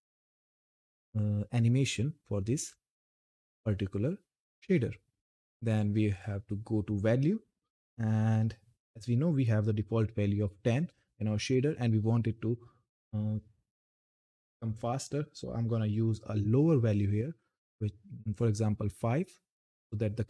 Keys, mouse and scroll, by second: 2.3 click, 5.4 click.